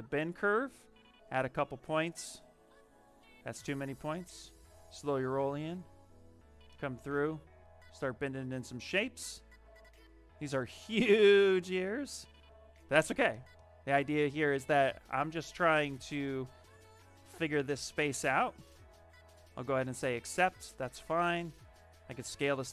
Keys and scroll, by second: 12.6 q, 17.4 w.